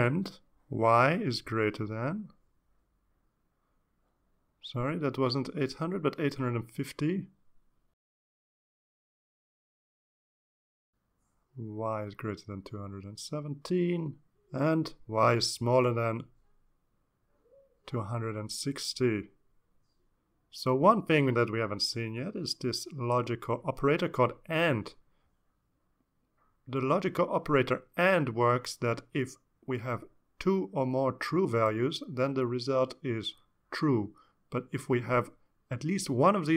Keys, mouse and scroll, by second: 0.6-1.9 typing, 3.1 click, 3.9 click, 5.5 click, 6.6 click, 7.4 5, 8.3 click, 9.8 click, 11.9 click, 12.3 click, 14.9 click, 15.7 click, 16.0-26.1 typing, 21.0 Return.